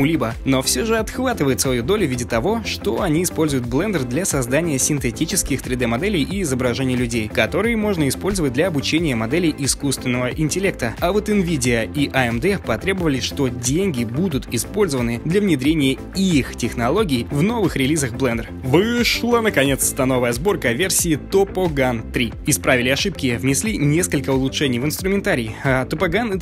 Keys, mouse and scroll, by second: 18.5 alt+click, 19.6 click, 20.0 click, 21.0 space, 21.7 alt+right click, 22.9 click, 23.8 ctrl+shift+click, 24.2 ctrl+alt+click, 25.0 alt+click, 25.3 shift+click, 26.1 alt+click.